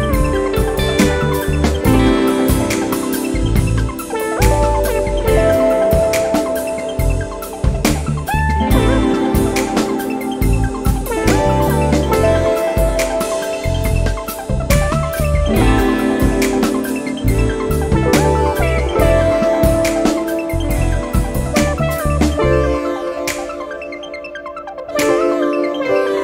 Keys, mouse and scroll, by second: 0.2-0.6 scroll up 1, 1.8 click, 5.1 click, 7.0 click, 7.9-8.3 scroll down 2, 8.9 scroll up 2, 11.0 click, 12.6 click, 13.6-14.1 scroll down 2, 14.3-14.7 scroll up 2, 16.7 click, 18.6 click, 20.9 click, 23.4 click, 25.4 click.